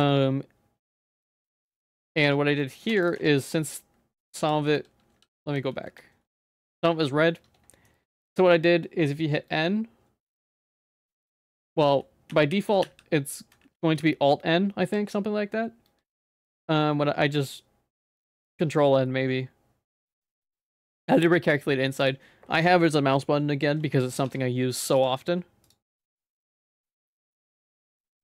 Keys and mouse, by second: 0.0-2.0 drag, 2.2 Tab, 2.6 middle click, 2.9 Tab, 3.2 Tab, 3.5 middle click, 4.2 ctrl+z, 4.4 ctrl+z, 4.6 ctrl+z, 4.7 ctrl+z, 4.9 ctrl+z, 5.2 ctrl+z, 5.6 ctrl+z, 5.9 ctrl+z, 6.1 ctrl+z, 6.7 middle click, 7.7 middle click, 12.3 n, 12.8 n, 14.0 alt+n, 24.3 Tab, 24.9 ctrl+s, 25.7-27.3 drag, 27.4 z, 27.7 middle click.